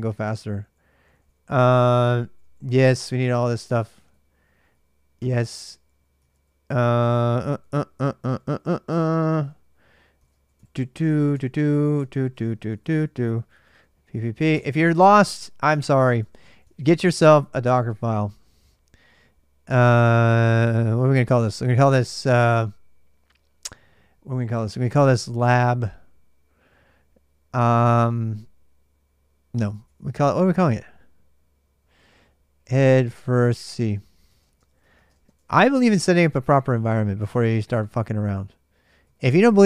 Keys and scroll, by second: 0.2 ctrl+[, 0.3 ctrl+j, 3.4-8.1 typing, 8.7 Return, 8.9 ctrl+a, 9.1 ctrl+a, 9.9-17.8 typing, 11.4 ctrl+[, 11.5 ctrl+j, 12.0 Return, 14.3 Return, 19.8-21.3 typing, 25.0-25.9 typing, 29.3 typing, 31.5-38.8 typing, 35.8 ctrl+[, 37.5 Return.